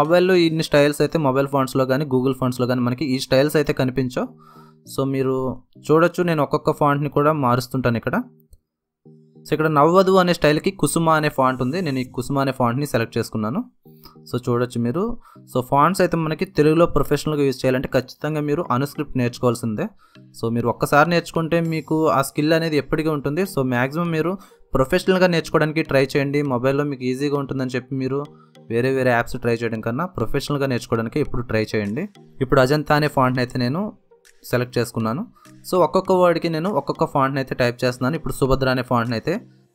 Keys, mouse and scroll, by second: 2.4-7.6 drag, 11.7 alt+Num_Lock, 11.9 alt+Tab, 13.8 click, 14.6-16.1 typing, 16.1 Return, 19.5 alt+Tab, 20.8-23.1 drag, 23.5-27.9 drag, 27.9 alt+Tab, 29.3-30.5 drag, 30.7-32.3 typing, 34.0-35.6 drag, 35.8-37.1 typing, 37.2 ctrl+z, 39.4-39.7 drag.